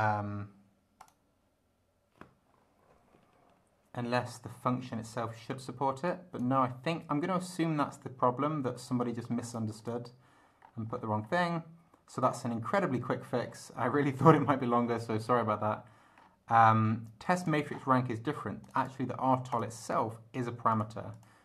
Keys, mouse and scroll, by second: 1.0 click, 6.0 click, 7.1 scroll up 1, 9.1 scroll down 1, 9.5 click, 9.8 click, 10.6-11.5 scroll up 4, 13.4-14.1 scroll up 4, 14.8 scroll up 2, 15.4 scroll up 2, 16.2-16.8 scroll up 4, 17.2 click, 17.7-18.0 scroll down 1, 18.6 click, 19.5 click, 19.8 click, 20.7 click, 21.1 click.